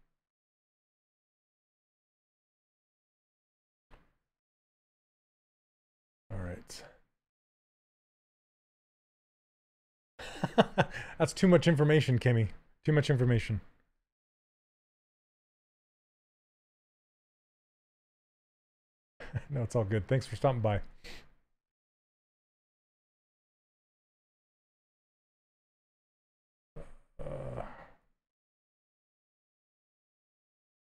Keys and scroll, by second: 13.5 s, 15.7 shift+f, 16.1 w, 18.0 q, 20.9 s, 26.6 ctrl+z, 29.7 s.